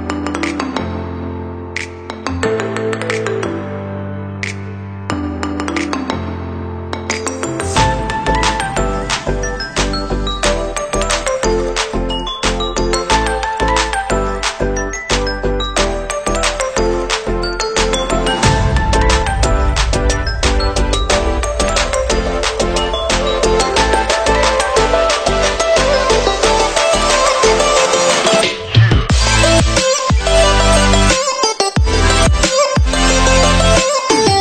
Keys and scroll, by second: 1.0 Caps_Lock.